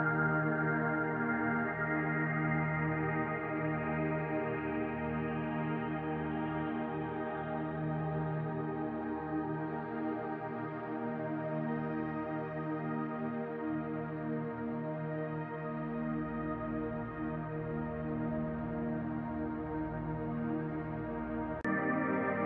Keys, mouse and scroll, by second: 0.0-10.9 drag, 10.9 shift+middle click, 11.6-21.5 drag, 21.5 middle click, 21.9-22.4 drag.